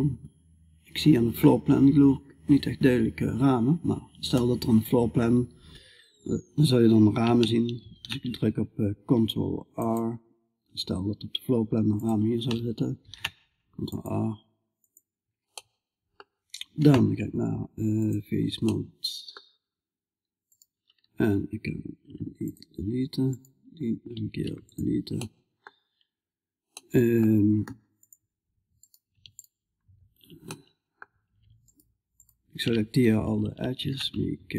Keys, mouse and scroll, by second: 7.2 ctrl+r, 12.4 ctrl+r, 17.4-19.9 drag, 19.9-22.0 right drag, 22.7-25.4 right drag, 25.4 middle click, 26.0-27.0 middle drag, 27.4 middle click, 28.2-29.9 drag, 28.2-29.9 right drag, 29.9 middle click, 30.0 click, 30.0 right click, 30.1 middle click, 31.1-34.5 drag, 31.1-34.5 right drag.